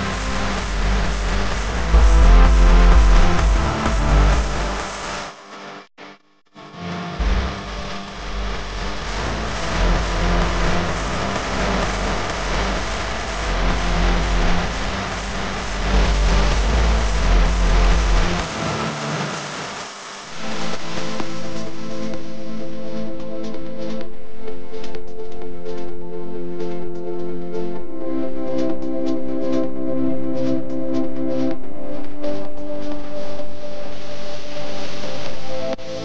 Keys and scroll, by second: 1.5 space, 4.1-4.6 typing, 9.7-10.3 typing, 22.2-22.9 space, 26.2 space, 26.7 space, 26.8 space.